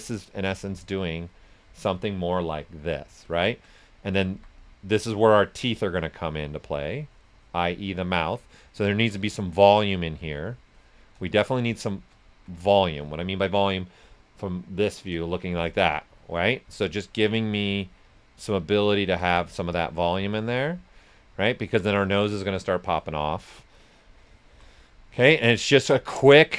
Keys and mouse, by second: 3.8 right click, 4.2 s, 4.3-8.7 drag, 10.1 shift+click, 11.2 right click, 16.7 click, 19.6 shift+click, 20.8 right click, 23.4 alt+click, 23.4 typing, 24.6 right click, 25.1 alt+click, 26.3 alt+click.